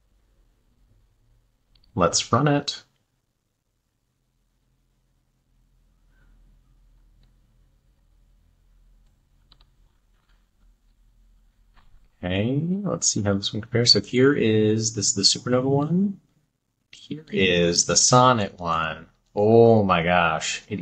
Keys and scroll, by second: 11.1 super+`, 18.5 Left.